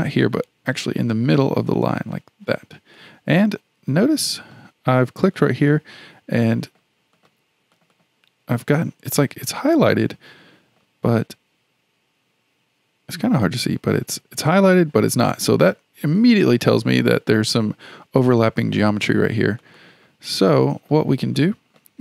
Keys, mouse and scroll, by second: 1.6 shift+click, 1.8 shift+click, 3.0-5.4 middle drag, 5.4 click, 5.6 click, 6.4-7.1 middle drag, 7.1 click, 7.7 click, 7.9 click, 9.1 scroll up 2, 9.7-12.8 middle drag, 13.2-14.9 middle drag, 14.9-16.0 scroll down 2, 16.0-16.5 scroll down 1, 16.5-18.5 middle drag, 18.5 scroll down 2, 19.6 click, 19.8 click, 20.6-22.0 middle drag.